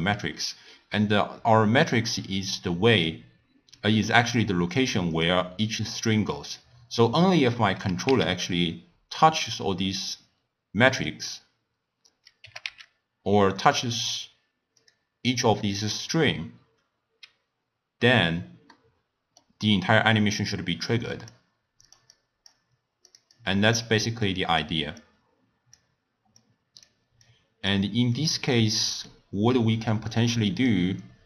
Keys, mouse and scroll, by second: 2.9 click, 4.3 click, 4.7 drag, 5.1 click, 6.4 click, 7.9 g, 12.4 g, 18.7-20.8 middle drag, 20.8 click, 21.8 click, 22.1-23.1 drag, 23.4 click, 25.0 click, 26.4 click, 27.2 click, 28.8 middle click, 29.4-30.6 scroll down 2, 30.6 click.